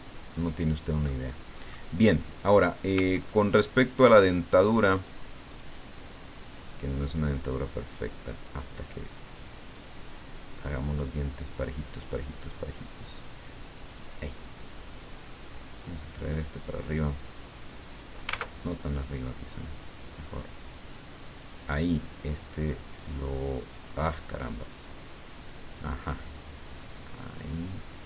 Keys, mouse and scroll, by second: 1.2 click, 3.1-3.7 ctrl+scroll up 2, 4.8 click, 5.5 click, 6.1-10.3 drag, 10.9 click, 11.6-13.4 drag, 13.9 click, 16.2-17.6 drag, 19.4-21.6 drag, 21.9-23.1 drag, 23.7 click, 24.6 click, 26.6-28.0 drag.